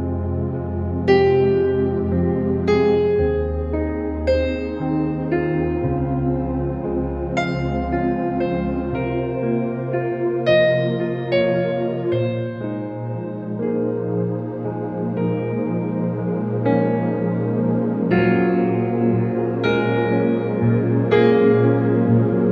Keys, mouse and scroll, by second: 0.6 space, 10.6 ctrl+-, 11.5 ctrl+o, 12.7 click, 15.1 ctrl+a, 15.5 ctrl+c, 16.0 ctrl+w, 16.6 ctrl+v, 17.4 ctrl+[, 17.5 ctrl+-, 18.3 ctrl+t, 18.5 right click, 19.9 click, 21.9-22.5 alt+drag.